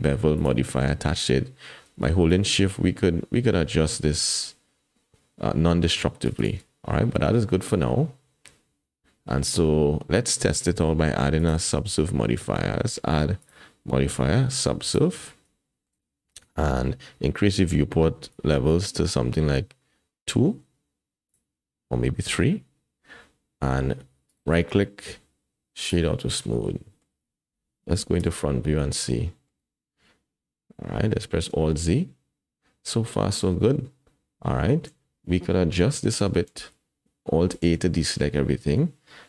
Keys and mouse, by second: 0.3 click, 2.4-6.3 shift+drag, 7.4-9.4 middle drag, 13.5-15.0 drag, 15.6 shift+middle click, 18.3 click, 21.3 click, 22.2 click, 24.4 right click, 26.6-27.0 middle drag, 28.2 KP_1, 29.3 shift+click, 29.5 shift+middle click, 31.4 alt+z, 35.8 Tab, 37.6 alt+a.